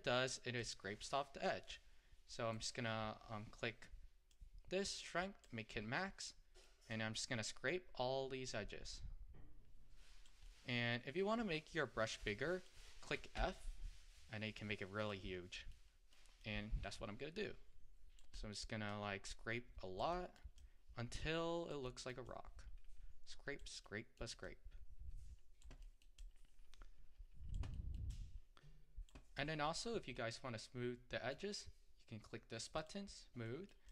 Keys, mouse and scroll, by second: 0.0 middle click, 0.7-6.3 drag, 6.3 middle click, 7.0-10.0 drag, 10.5-12.1 middle drag, 12.1-13.4 drag, 13.4 f, 15.8 middle click, 16.5-18.4 drag, 18.4 middle click, 18.9-20.2 drag, 20.2 middle click, 20.6-21.9 drag, 21.9 middle click, 22.3-23.9 drag, 23.9 middle click, 24.5-25.9 drag, 25.9 middle click, 26.2-27.8 drag, 27.8 middle click, 28.2-30.2 drag, 30.2-32.9 middle drag, 32.9 click, 33.5 middle click.